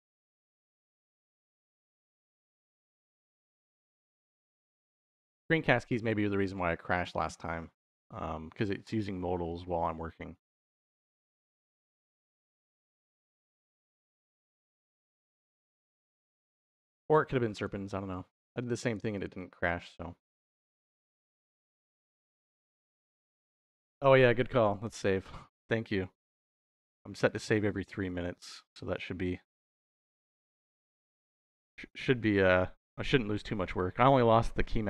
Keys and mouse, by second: 0.4 click, 1.1 ctrl+s, 2.0 middle click, 2.8 middle click, 3.7 middle click, 8.2 middle click, 8.8 middle click, 10.6 click, 11.8 g, 13.0 click, 15.0 click, 15.5 middle click, 17.3 click, 17.9 click, 19.0 click, 19.5 click, 20.6-22.0 drag, 22.3 click, 23.4 middle click, 24.0 click, 24.7 ctrl+s, 27.2-28.6 drag, 30.6 middle click, 31.5 middle click, 32.4 middle click, 33.5 middle click.